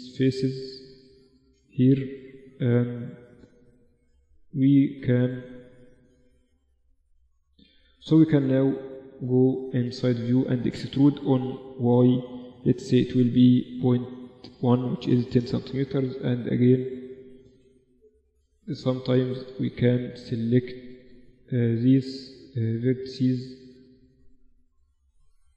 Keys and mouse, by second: 1.0 z, 3.0 z, 3.5 z, 7.2 z, 8.2-8.6 KP_6, 9.3-11.0 middle drag, 11.0 e, 15.5 KP_1, 16.3 middle click, 16.9 z, 24.0-25.5 middle drag.